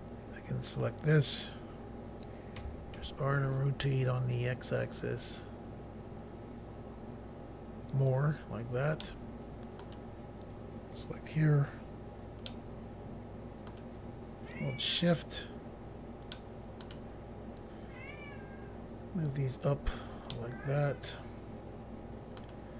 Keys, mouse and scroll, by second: 1.1 click, 2.6-3.0 typing, 8.0 click, 9.1 middle click, 10.5 click, 10.6 click, 12.6 middle click, 15.1 shift+click, 16.4 middle click, 17.7 click, 20.4 middle click.